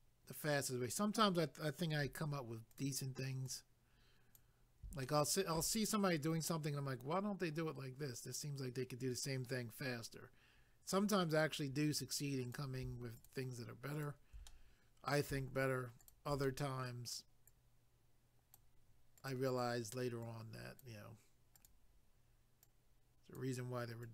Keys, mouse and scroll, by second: 2.7 click, 2.8 click, 3.5 click, 5.0 shift+middle click, 5.9 middle click, 12.5 click, 12.6 click, 13.2 shift+click, 13.3 shift+click, 13.9 shift+click, 14.1 shift+click, 14.5 middle click, 16.0 shift+click, 16.1 shift+click, 16.4 middle click, 17.5 click, 19.2 click, 19.3 click, 20.2 click, 21.5 click, 21.6 click, 22.6 click, 24.0 click.